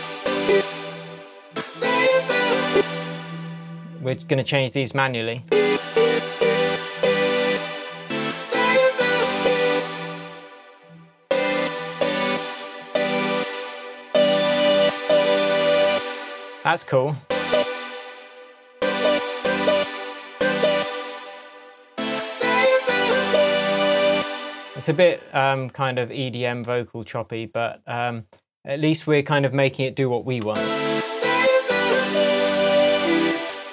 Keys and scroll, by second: 2.7 space, 5.4 space, 9.7 space, 11.2 space, 18.7 space, 24.1 space, 33.4 space.